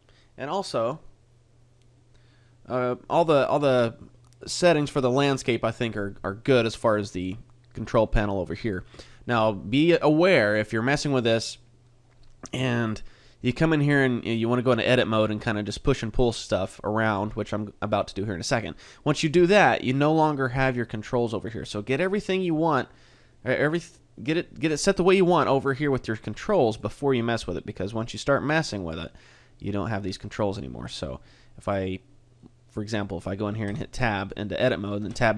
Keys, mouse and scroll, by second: 8.2 click, 10.4 middle click, 12.9 middle click, 21.1 click, 26.3 click, 32.4 middle click, 33.0 middle click, 33.7 Tab, 35.0 Tab.